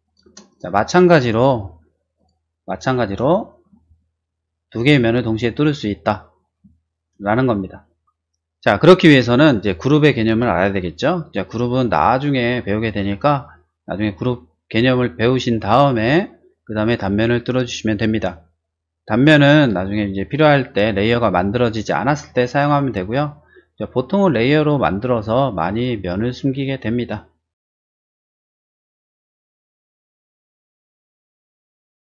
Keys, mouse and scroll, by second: 0.0 click, 0.2 space, 0.4 click, 2.1 click, 2.7 middle click, 2.9 middle click, 3.2 shift+middle click, 3.7-6.3 shift+middle drag, 6.7 shift+middle click, 7.3 shift+middle click, 32.0 click.